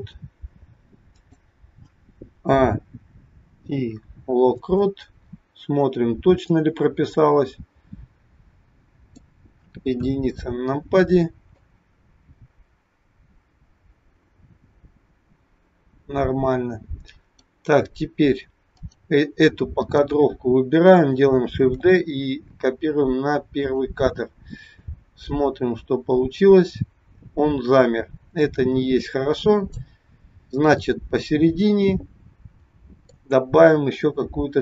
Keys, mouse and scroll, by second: 2.3 a, 3.6 i, 6.6 click, 9.9 KP_1, 11.7 click, 18.7 click, 19.8 click, 21.5 shift+d, 24.9 click, 30.8 middle click.